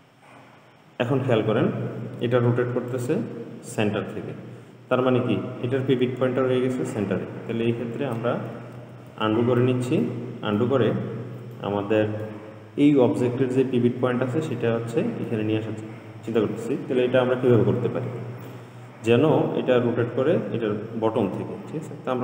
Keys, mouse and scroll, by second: 9.0 ctrl+z, 9.3 ctrl+z, 10.3-17.9 middle drag.